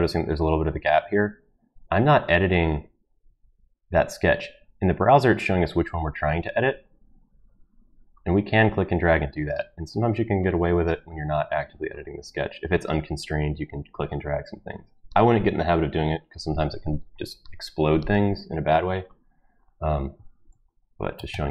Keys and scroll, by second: 20.5 ctrl+v, 21.1 BackSpace, 21.3 BackSpace.